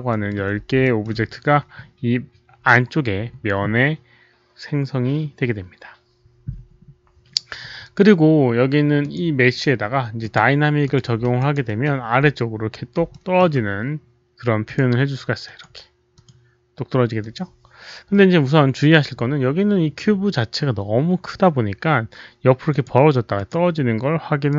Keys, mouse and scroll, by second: 0.0 alt+middle click, 0.8 alt+middle click, 3.3 alt+middle click, 3.3 alt+right click, 3.3 alt+click, 5.7 alt+middle click, 5.7 alt+right click, 8.9 click, 10.1 click, 10.8 click, 11.3 alt+right click, 12.0 alt+middle click, 12.5 alt+right click, 12.5 click, 13.0 alt+middle click, 14.6 click, 15.4 click, 16.1 click, 17.1 click, 17.3 alt+middle click, 17.3 alt+right click, 21.0 click, 21.0 alt+middle click, 21.0 alt+right click, 22.6 click, 23.3 click, 24.4 click.